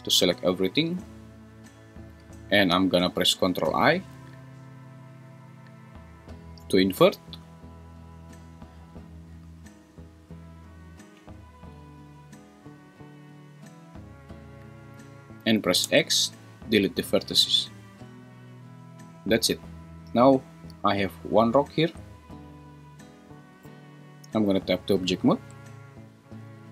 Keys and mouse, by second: 6.1 ctrl+i, 15.8 x, 23.7 Tab.